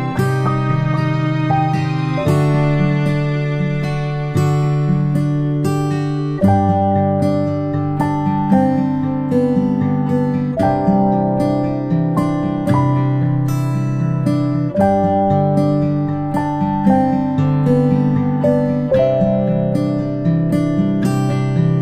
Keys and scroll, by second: 0.2 ctrl+z, 16.1 g.